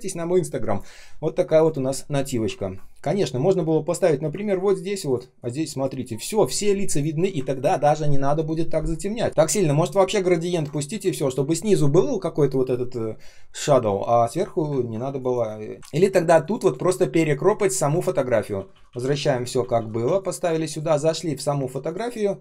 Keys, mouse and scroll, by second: 2.4 ctrl+scroll down 1, 4.0-5.1 ctrl+scroll up 1, 7.4 ctrl+click, 9.3 ctrl+z, 10.3-11.4 ctrl+scroll down 1, 14.7 ctrl+scroll down 1, 15.0 space, 15.7 ctrl+scroll up 1, 18.3 ctrl+z, 20.6 ctrl+click.